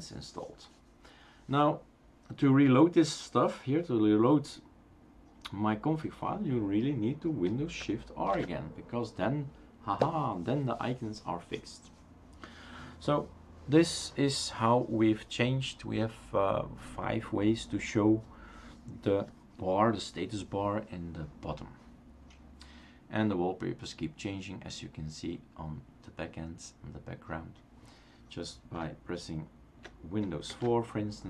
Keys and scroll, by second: 8.7 shift+super+r, 30.5 super+'.